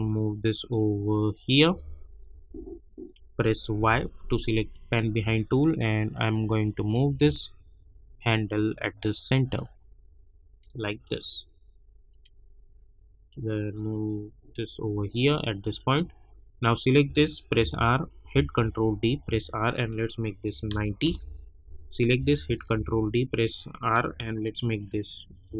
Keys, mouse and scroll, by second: 2.3 Right, 3.7 y, 4.7-7.4 drag, 7.4-7.9 alt+scroll up 1, 8.4-16.7 drag, 17.5 r, 18.6 ctrl+d, 19.2 r, 19.7 click, 21.0 Return, 21.9 click, 22.6 ctrl+d, 23.9 r, 24.6 click.